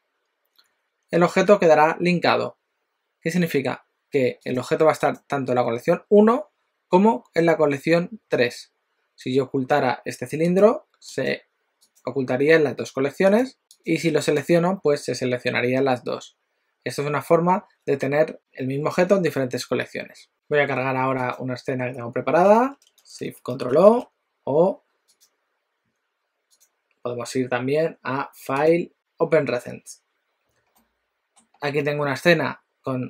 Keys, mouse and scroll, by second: 4.6 click, 5.0 click, 10.5 click, 11.3 click, 13.3 click, 13.6 click, 13.9 click, 14.3 click, 21.2 click, 23.7 ctrl+shift+o.